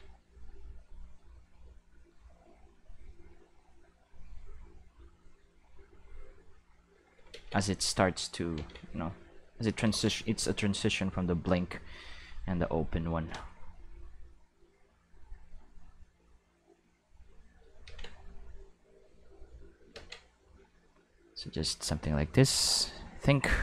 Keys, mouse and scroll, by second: 0.7-3.4 drag, 4.7 click, 6.4 click, 7.3 ctrl+z, 7.8 click, 8.6 ctrl+z, 9.0 click, 9.8 ctrl+z, 11.1 click, 12.3 click, 15.5 click, 16.8 click, 17.9 ctrl+z, 18.4-19.8 drag, 19.9 ctrl+z, 20.7 click, 21.7-23.2 drag.